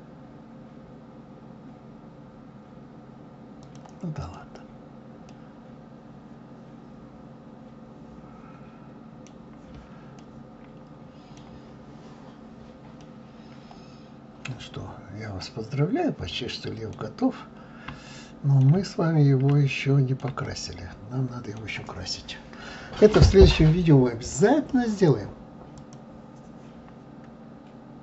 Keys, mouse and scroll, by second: 4.2 click, 5.3-8.3 middle drag, 9.3-10.1 scroll down 2, 10.2-12.4 middle drag, 12.4-13.0 scroll up 1, 13.0-15.6 middle drag, 15.6-16.3 scroll down 1, 16.3-17.4 middle drag, 17.4-18.1 scroll up 1, 18.1-18.9 shift+middle drag, 18.9-19.5 scroll down 1, 19.5-23.4 shift+middle drag.